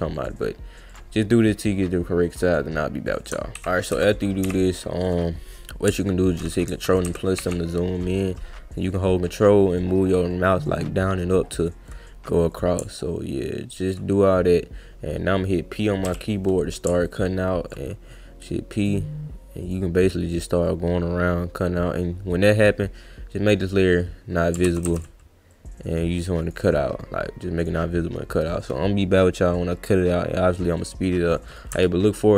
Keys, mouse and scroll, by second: 0.1 click, 0.9 click, 2.4 click, 3.1 shift+click, 12.5 click, 18.8 click, 19.7 click, 20.7-22.6 drag, 23.6 click, 24.7 ctrl+z, 24.9 ctrl+z, 25.5 click, 26.4 click, 27.6 click, 30.0-31.5 drag.